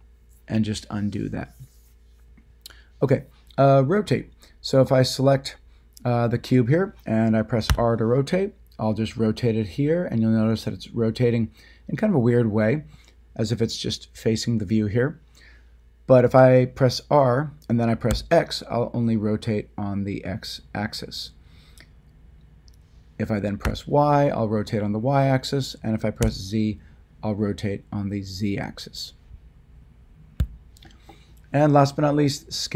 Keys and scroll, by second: 7.7 r, 18.1 x, 23.6 y, 26.2 z, 30.4 ctrl+z.